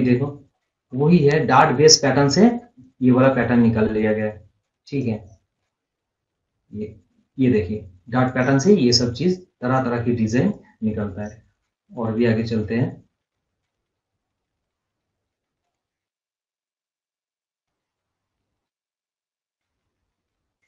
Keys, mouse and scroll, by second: 0.0 scroll down 1, 0.6 scroll up 1, 1.1 scroll up 1, 1.6 scroll down 1, 2.5 click, 3.2-3.6 scroll down 1, 4.7 click, 5.3 scroll down 1, 6.0 scroll down 1, 6.2-6.8 scroll, 6.9-7.6 scroll up 1, 7.6 click, 8.8 scroll up 1, 9.8-11.4 drag, 11.4 Down, 18.5 Down, 20.0 Down.